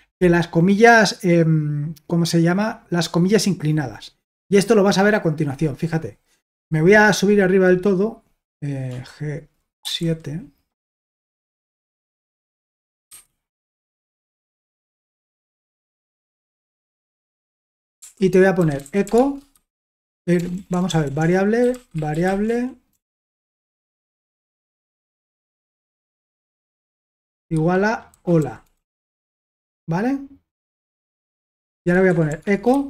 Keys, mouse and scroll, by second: 1.9-2.8 scroll down 2, 5.0 click, 8.9-9.8 typing, 13.1 2, 15.3 Return, 16.6-24.7 typing, 25.9-29.6 typing, 30.7 Return, 31.4-32.8 typing.